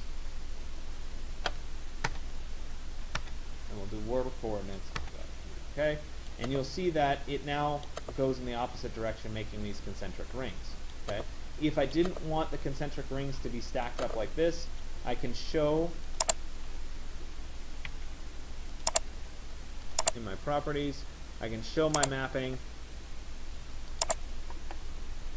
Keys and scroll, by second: 1.8 Return, 17.6 Escape.